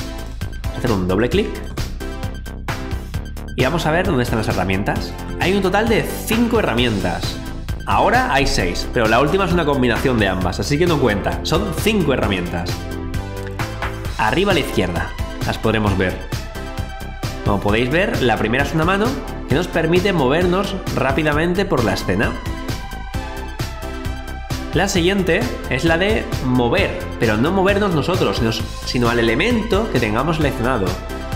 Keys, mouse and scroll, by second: 1.2 click, 1.7 q, 2.3 scroll down 1, 4.2 alt+click, 18.8 click, 25.3 click, 30.8 alt+click.